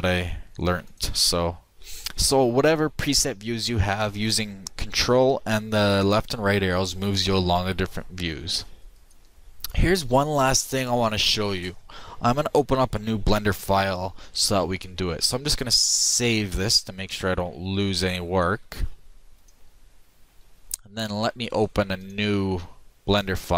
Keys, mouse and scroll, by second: 18.7 ctrl+s, 21.4 click.